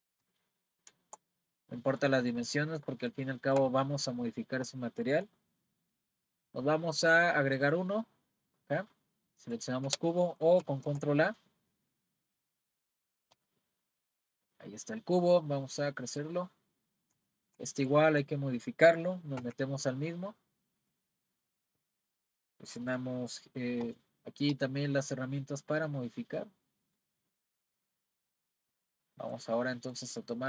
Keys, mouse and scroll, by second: 0.2 drag, 0.5-0.9 scroll up 1, 1.1-1.6 shift+scroll up 1, 2.1-2.6 scroll down 2, 2.6-3.7 middle drag, 3.7-4.9 scroll down 1, 4.9-6.2 scroll down 1, 6.2-6.7 scroll down 1, 7.6-10.6 drag, 10.8 shift+a, 14.4 click, 15.7 click, 16.5-19.4 middle drag, 19.4 Tab, 20.0 middle click, 20.8 click, 24.5-26.1 drag, 27.3-29.3 middle drag, 29.3 click, 29.7 middle click.